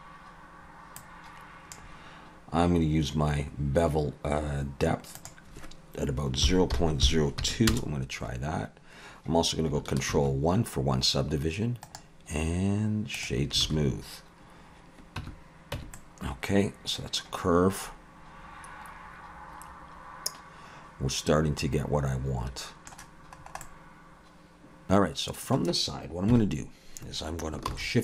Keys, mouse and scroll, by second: 1.0 click, 5.2 click, 10.1 ctrl+1, 12.0 right click, 13.7 alt+a, 15.2 Tab, 15.8 Tab, 16.0 middle click, 23.4-24.4 scroll up 2, 23.6 middle click, 25.1 alt+a, 26.3 KP_3, 27.7 shift+a.